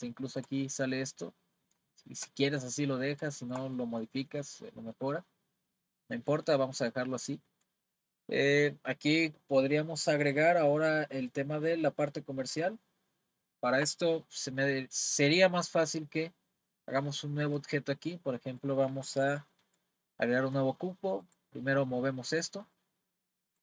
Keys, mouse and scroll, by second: 0.1-1.4 shift+middle drag, 1.4-1.9 scroll down 2, 1.9-2.9 shift+middle drag, 2.9-3.3 scroll down 1, 3.3-7.1 shift+middle drag, 7.1 scroll down 1, 7.5-10.6 middle drag, 18.3-20.1 middle drag, 20.1-20.5 scroll down 4, 21.2 click, 22.8 click.